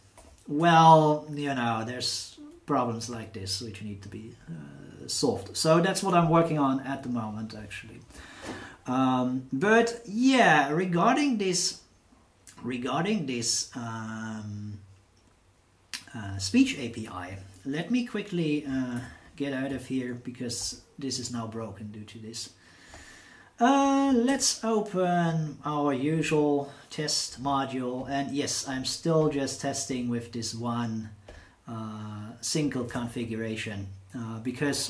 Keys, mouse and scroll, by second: 0.2 Insert, 18.9 ctrl+w, 24.3 ctrl+o, 26.1-27.0 drag, 27.3-28.2 drag, 28.7 click, 29.2-30.1 drag, 31.3 click, 32.8 super+Return.